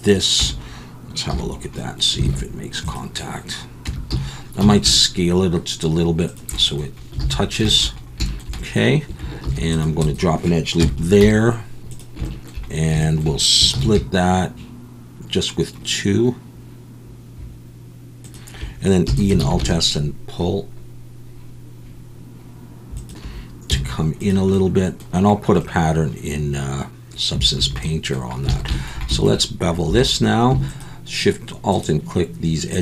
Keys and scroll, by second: 0.4 Tab, 1.3 /, 2.2 alt+a, 3.8 Tab, 4.1 a, 4.6 s, 7.2 alt+a, 9.4 ctrl+r, 10.8 KP_1, 11.2 z, 13.7 ctrl+b, 19.1 e, 19.4 alt+s, 23.7 z, 27.6 a, 28.5 alt+a, 29.9 2.